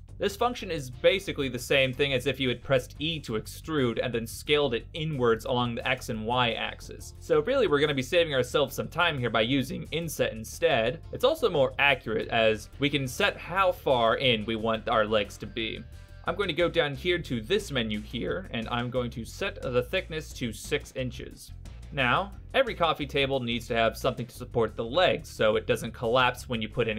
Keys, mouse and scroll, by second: 0.4 middle click, 2.0 middle click, 3.2 e, 5.5 s, 7.6 middle click, 9.1 ctrl+z, 9.3 ctrl+z, 9.5 ctrl+z, 10.9 right click, 13.3 ctrl+KP_7, 15.7 i, 19.1 click, 21.9 click.